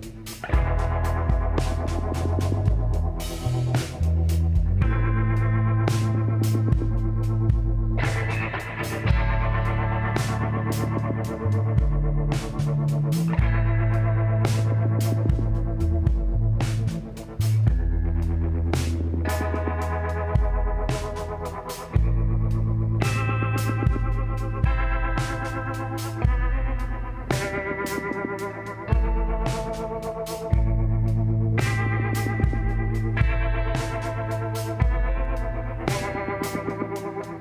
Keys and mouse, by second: 1.3 s, 3.5-4.8 drag, 4.8 middle click, 5.8 z, 6.4-8.9 middle drag, 7.9 e, 11.2 g, 14.2 r, 15.5 z, 15.7-16.9 middle drag, 18.4 z, 19.0 b, 24.2-26.0 drag, 24.8 z, 27.2 z, 27.8-29.6 drag, 28.2 b, 29.2 b, 30.3 b, 31.7 s, 33.3-35.0 drag, 35.0 s.